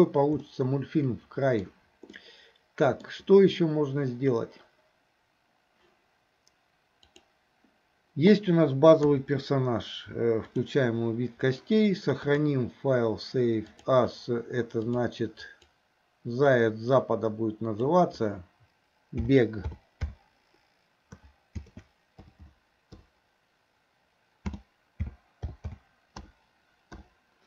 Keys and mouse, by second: 0.5-1.7 middle drag, 2.2-3.1 middle drag, 7.2 click, 9.1 KP_3, 10.6 click, 12.3-14.2 drag.